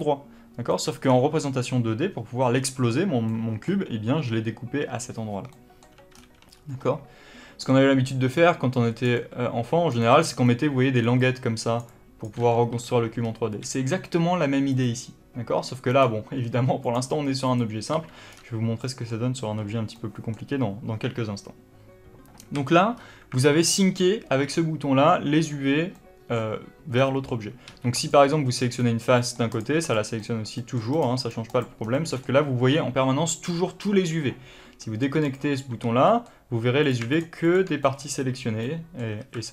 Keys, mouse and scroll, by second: 0.6 middle click, 0.9-1.2 scroll down 1, 3.2 middle click, 5.7-8.7 middle drag, 6.1-6.4 scroll down 2, 6.4-7.5 scroll up 2, 7.9 d, 8.7-14.7 drag, 9.0-12.1 typing, 12.7-13.1 scroll down 1, 13.1-13.5 scroll up 1, 13.5 n, 15.8 click, 16.7 click, 17.4 click, 17.9 n, 18.2-18.7 scroll down 1, 18.7-22.8 middle drag, 22.4 a, 22.8-23.3 scroll up 1, 23.3 alt+a, 25.8 middle click, 27.6 3, 27.9 click, 29.1 middle click, 29.4 click, 29.7 click, 30.1 middle click, 30.9 click, 31.1 click, 31.4 click, 31.7 scroll down 1, 31.9-35.1 middle drag, 35.1 click, 35.7 alt+a, 36.0 middle click, 36.7 click, 37.0 shift+click, 37.4 shift+click, 37.7-39.1 middle drag, 39.1 alt+a.